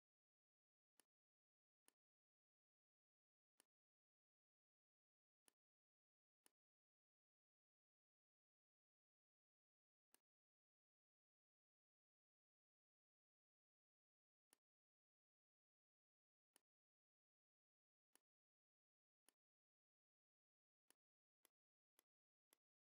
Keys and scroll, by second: 12.5 shift+m, 17.3 v, 20.6 z, 21.3 space, 21.7 v.